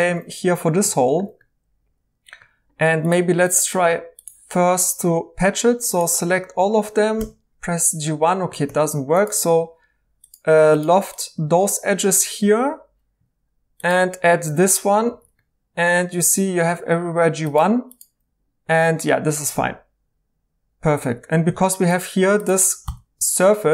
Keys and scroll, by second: 7.1 Tab, 8.6 Escape, 12.5 i, 15.1 e, 21.4 Tab, 22.8 x.